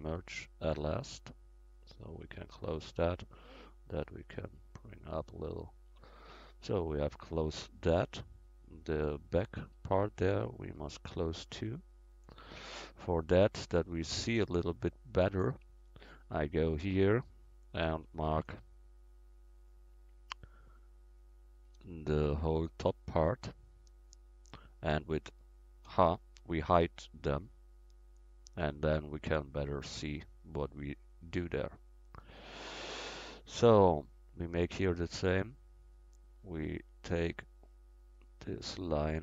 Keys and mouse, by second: 0.0-2.0 drag, 2.0 middle click, 2.9-5.0 right drag, 3.7-5.2 drag, 5.9 Tab, 11.6-13.1 middle drag, 14.5 KP_1, 15.9-17.6 middle drag, 16.4 Tab, 17.9 b, 19.5-23.0 drag, 21.7 b, 25.9 h, 28.0-29.7 middle drag.